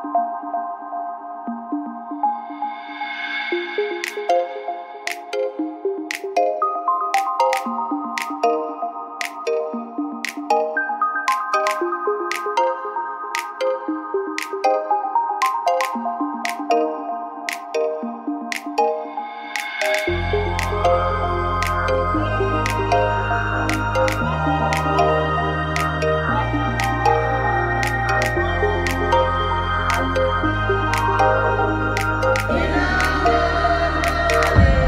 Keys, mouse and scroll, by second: 0.2-1.9 right drag, 0.6 g, 2.1 click, 2.5 middle click, 2.5 right click, 2.8-4.2 middle drag, 4.2-5.4 right drag, 5.5 g, 7.6-9.5 drag, 8.2 g, 9.9 middle click, 10.3 a, 11.0 z, 12.0 n, 12.9 click, 13.1 n, 14.8-15.8 drag, 15.4 x, 16.2 x, 17.3 x, 18.8 click, 19.2 shift+x, 20.4 x, 21.2-23.2 drag, 24.0-25.0 drag, 25.0 x, 25.7-26.7 drag, 26.7 x, 27.4-30.1 drag, 28.2 f, 28.2 a, 31.3 g, 33.8 click.